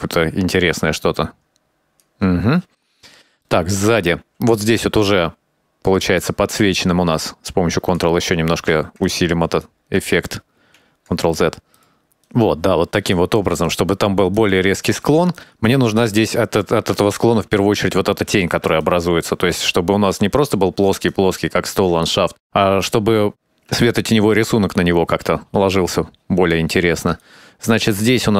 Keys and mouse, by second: 3.6 shift+middle click, 5.2-6.3 ctrl+drag, 6.7-8.1 ctrl+drag, 9.2 click, 10.7 ctrl+z, 11.5 middle click, 11.8 middle click, 12.5 KP_0, 13.3 ctrl+click, 14.2 ctrl+click, 14.8 ctrl+click, 15.1 ctrl+click, 15.5 ctrl+click, 16.5 ctrl+z, 18.3 click, 19.4 ctrl+click, 20.0 ctrl+click, 20.9 middle click, 21.9-23.0 middle drag, 24.7-27.3 ctrl+drag, 27.4 middle click.